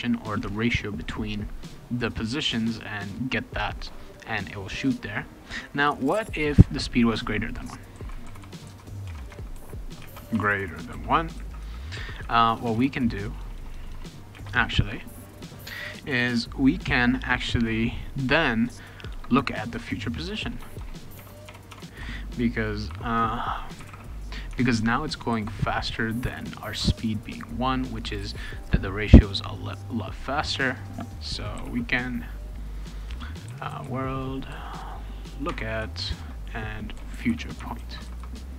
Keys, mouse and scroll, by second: 7.7-10.3 typing, 10.9 ctrl+s, 12.5-14.3 typing, 19.1 Return, 20.2 BackSpace, 20.4 BackSpace, 20.6 BackSpace, 20.8 BackSpace, 21.2 Tab, 21.5 Tab, 21.7 Tab, 22.9-25.3 typing, 24.5 Tab, 31.3-32.1 typing, 33.2-34.5 typing, 35.5 Tab, 36.0-38.5 typing.